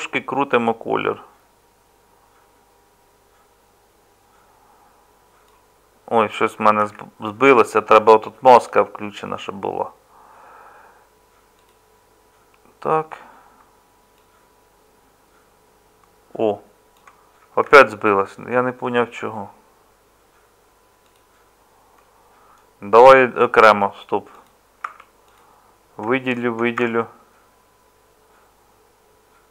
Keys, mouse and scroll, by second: 6.8 ctrl+z, 17.7 ctrl+z, 24.8 Tab, 26.8 Tab.